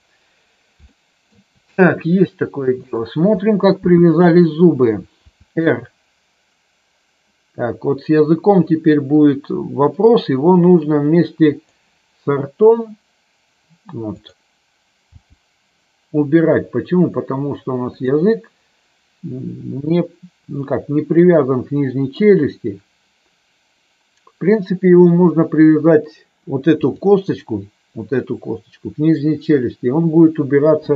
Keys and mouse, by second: 0.9 shift+middle click, 2.8 click, 5.1 r, 11.4 click, 15.1 g, 17.9 click, 26.8 click.